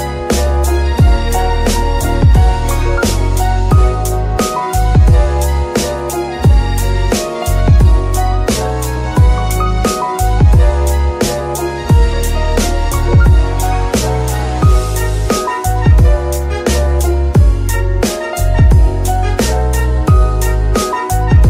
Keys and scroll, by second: 0.0-1.2 typing, 2.9-4.0 typing, 7.5 Return, 10.4 shift+g, 10.5 shift+z, 12.6 F2, 13.8 BackSpace, 14.1 u, 14.7 Return, 20.4 z.